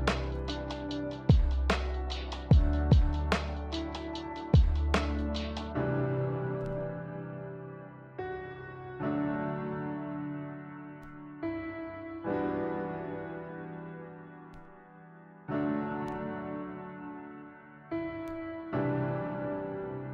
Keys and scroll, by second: 0.4 s, 1.9 a, 12.8-13.5 typing, 15.6 x.